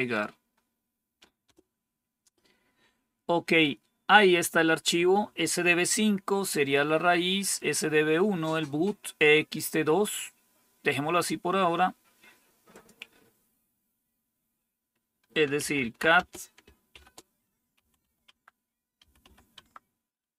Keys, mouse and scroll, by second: 1.3 Return, 12.6 click, 15.2-19.4 typing, 19.4 Tab.